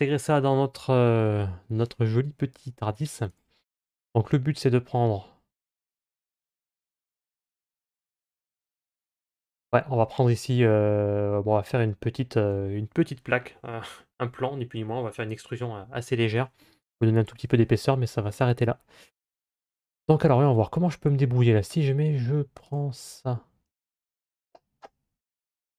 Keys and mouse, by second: 20.1 Tab, 21.2 middle click, 22.5 right click.